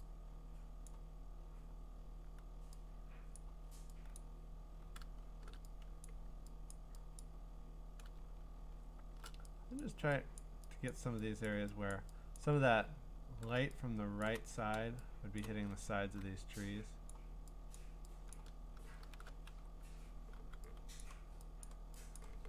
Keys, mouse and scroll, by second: 3.4 click, 4.2 click, 5.2 !, 6.1 click, 6.7 click, 7.2 click, 8.3-9.0 scroll, 9.8 click, 10.4 click, 10.9 click, 11.5 click, 11.9 click, 12.4 click, 13.0-13.4 scroll, 14.2 click, 15.8 scroll, 17.1 click, 17.8 click, 18.3 click, 19.6-20.4 typing, 21.0 click, 21.7 click, 22.2 click.